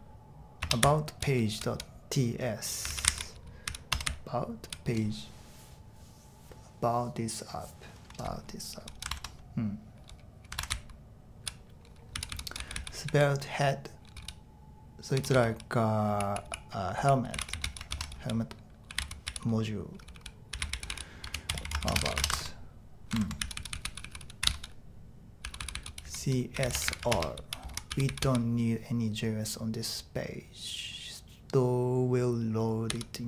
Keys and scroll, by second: 0.0-1.5 typing, 2.6-4.9 typing, 9.1 super+Right, 10.7-14.1 typing, 15.1-28.7 typing, 23.1 super+Tab, 32.9 typing.